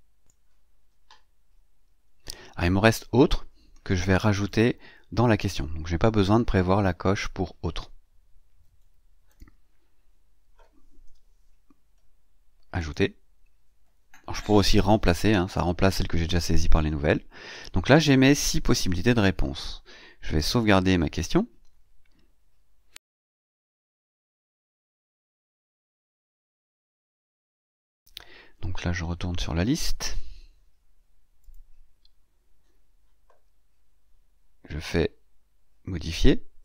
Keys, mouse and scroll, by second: 0.2 click, 9.1 click, 10.9 BackSpace, 12.7 click, 19.3-19.7 scroll up 2, 20.5 click, 27.6 click, 29.9-30.2 scroll down 2, 31.3 click, 36.5 click.